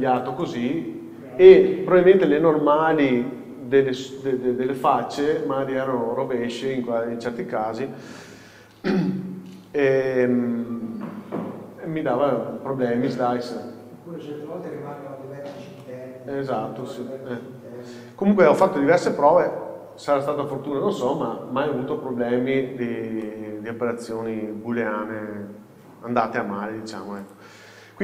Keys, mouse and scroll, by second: 13.9-27.3 middle drag, 13.9-14.5 scroll down 1, 14.7-15.9 scroll up 1, 22.8-23.3 scroll down 1, 24.0 scroll up 1, 27.3 click.